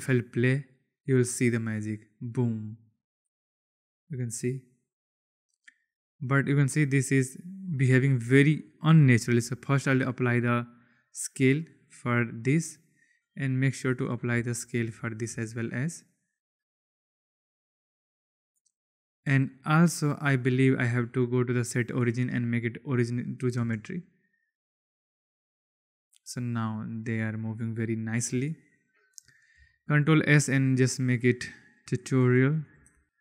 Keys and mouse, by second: 4.8 click, 8.1 space, 9.1 ctrl+a, 11.9 click, 13.4-14.1 drag, 14.5 ctrl+a, 15.2 space, 18.3 space, 19.6 click, 20.3-22.4 drag, 23.5 space, 28.2 space, 28.5 click, 29.5 ctrl+s.